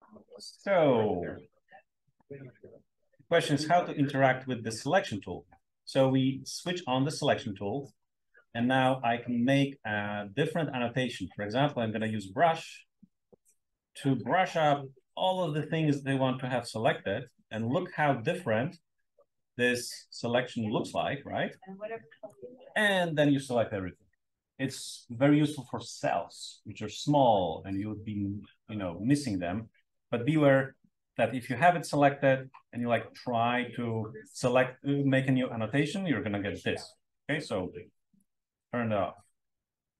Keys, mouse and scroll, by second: 4.5 click, 6.5 click, 9.9 click, 12.2-22.3 drag, 32.7 click, 33.1 click, 33.9-36.9 drag, 38.1 click.